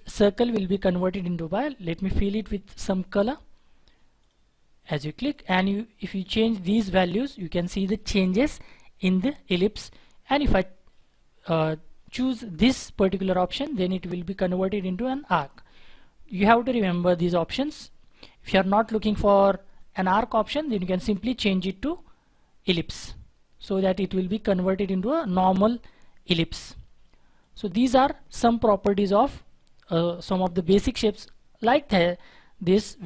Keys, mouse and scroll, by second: 6.3 double click.